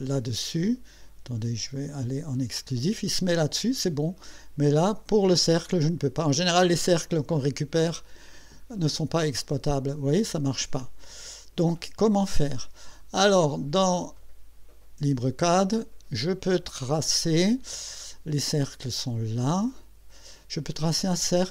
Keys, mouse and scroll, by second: 1.8 click, 5.8-6.1 scroll up 2, 6.4 scroll up 2, 8.3 middle click, 8.6 scroll up 2, 11.3 click, 19.7 click.